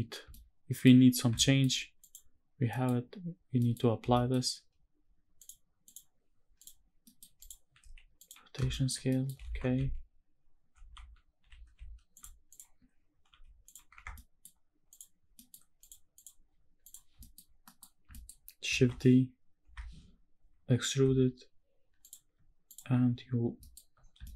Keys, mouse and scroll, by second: 0.0-0.6 shift+middle drag, 1.1 shift+middle drag, 1.7 click, 2.4 middle click, 2.6-3.3 scroll up 2, 3.3 middle drag, 3.4-3.8 scroll down 3, 3.8 middle click, 5.1-5.7 drag, 6.3 click, 6.8 middle click, 7.1 click, 7.5 ctrl+a, 8.4 shift+middle drag, 8.7-9.3 scroll up 2, 8.8 middle drag, 9.3 shift+`, 12.2 click, 13.0 h, 13.3 click, 13.6 Tab, 13.8 middle click, 14.3 scroll up 1, 14.6 click, 14.9 scroll up 1, 15.1 middle click, 15.5 click, 16.5 click, 16.8 scroll down 1, 16.9 shift+middle click, 17.3 middle click, 17.6-18.3 scroll up 3, 17.8 shift+middle click, 18.5 shift+d, 19.3 Escape, 19.7-20.2 scroll up 4, 20.6 e, 21.7 ctrl+click, 22.4 click, 22.7-23.3 scroll down 4, 23.3 shift+middle click, 23.5 shift+scroll up 1, 23.8 scroll down 1, 23.9 shift+middle click, 23.9-24.3 shift+scroll up 2.